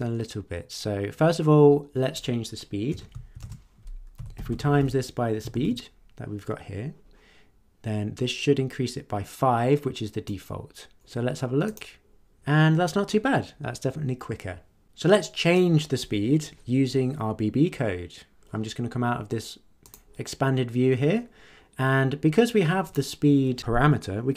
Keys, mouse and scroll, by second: 2.9-5.2 typing, 5.5 ctrl+s, 10.3-11.1 drag, 11.6 click, 19.8 click, 22.8 click.